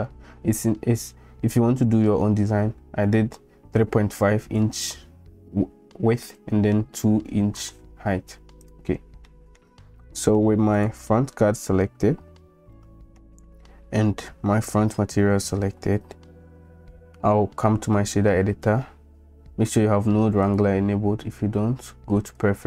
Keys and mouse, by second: 9.3 middle click, 10.0 middle click, 10.7 click, 12.7 middle click, 18.1 click, 20.6-22.1 drag.